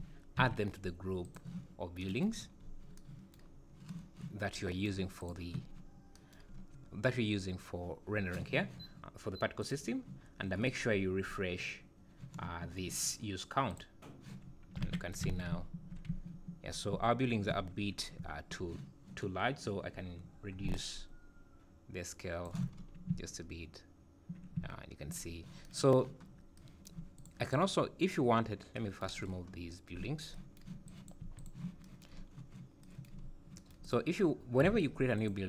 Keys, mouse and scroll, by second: 0.4 m, 2.4-2.9 scroll up 12, 3.5 scroll down 1, 5.2 click, 6.5 scroll up 2, 7.4 scroll up 3, 7.6 scroll down 2, 9.6 click, 10.1-10.6 scroll down 5, 10.8-11.7 scroll up 9, 13.7 click, 14.4 scroll down 5, 15.3 alt+a, 15.5-18.2 typing, 19.9-20.6 scroll up 2, 20.7 shift+click, 22.7 scroll up 5, 24.5 `, 25.3 scroll down 1, 26.3 scroll up 3, 27.1 click, 27.4 click, 28.3 scroll down 5, 29.1-29.6 scroll down 7, 30.1 scroll down 1, 30.8 click, 31.2 x, 32.1-32.8 scroll up 10, 33.2 scroll up 2, 33.8 click, 35.1 click.